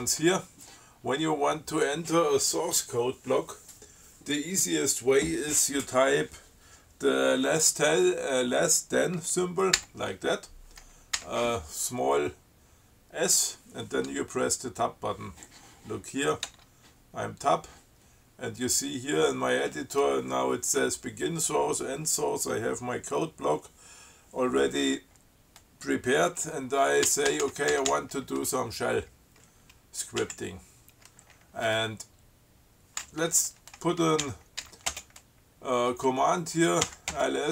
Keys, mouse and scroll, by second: 2.0 click, 10.0 <, 11.4 s, 16.7 Tab, 27.1-28.5 typing, 30.5 Down, 34.5 l, 34.9 s, 35.1 space, 37.1-37.5 typing.